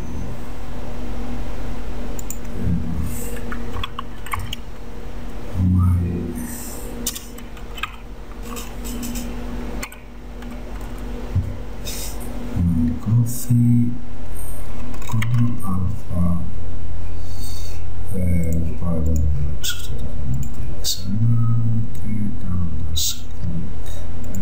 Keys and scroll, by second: 3.8 m, 4.4 y, 5.2 y, 7.2 Return, 7.4-8.4 typing, 9.9 f, 10.9 e, 15.3 ctrl+a.